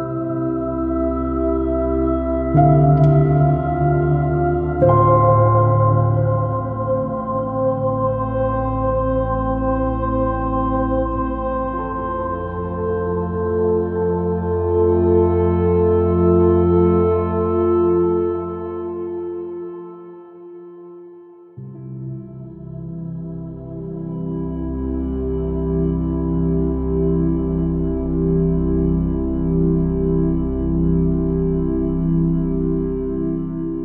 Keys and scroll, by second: 20.5 m, 20.7 space, 25.2 super++, 25.4 super+space, 25.7 super+t.